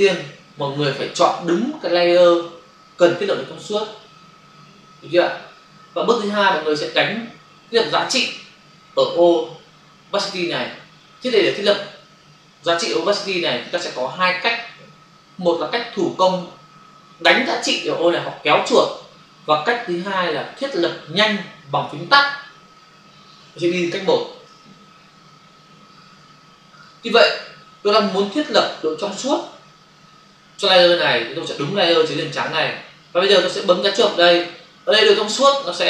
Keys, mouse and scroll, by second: 24.4 f, 26.8 click, 32.3 click, 32.5 click, 34.5 click.